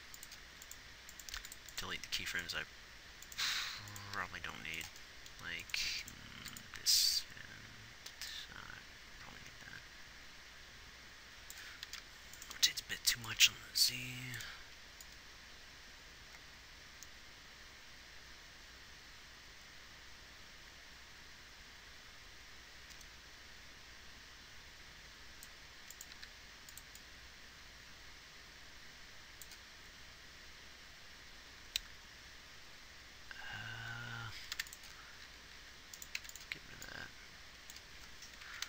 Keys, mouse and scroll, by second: 1.7 x, 4.6 g, 15.4-17.4 drag, 26.5 g, 29.4-35.0 middle drag.